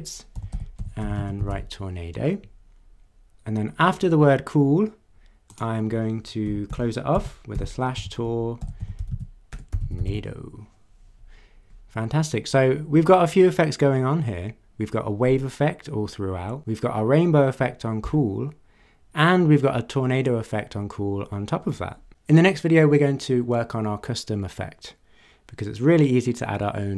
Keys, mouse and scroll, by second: 0.2-2.0 typing, 5.5 click, 6.4-10.5 typing, 7.1 Left.